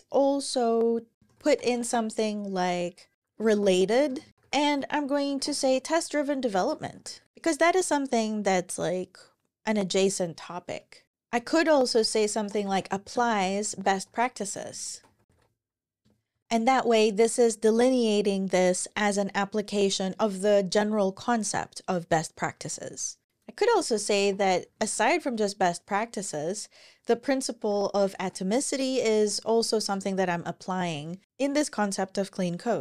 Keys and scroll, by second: 1.1-7.7 typing, 11.1 Return, 11.2-13.9 typing, 15.9 Return, 16.2 Page_Down, 23.2-25.2 typing, 27.5-28.4 typing, 28.8 Down, 29.7 Return, 30.5 Down.